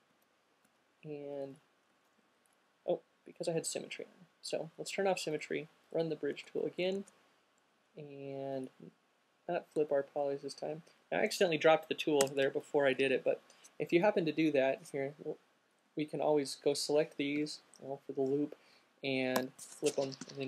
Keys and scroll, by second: 0.0 space, 7.2 alt+super+z, 12.5 alt+q, 12.8 space, 18.3 l, 19.6 f.